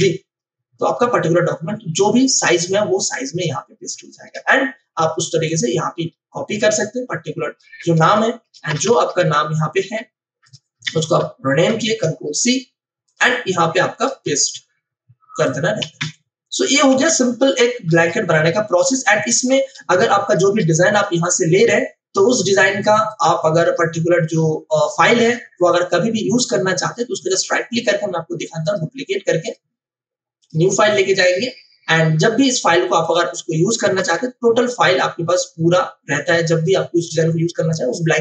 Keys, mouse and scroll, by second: 1.6 space, 1.9 click, 2.1 space, 4.3 v, 5.4 alt+click, 8.0 space, 8.9 ctrl+o, 10.4 click, 10.8 F2, 11.6 ctrl+c, 13.0 click, 14.2 Escape, 15.4 click, 15.9 t, 16.8 click, 17.2 ctrl+a, 18.9 ctrl+v, 18.9 click, 19.7 space, 20.0 click, 20.2 space, 20.9 click, 21.4-21.8 scroll down 1, 23.0 click, 26.9 right click, 28.6 click, 33.9 ctrl+BackSpace.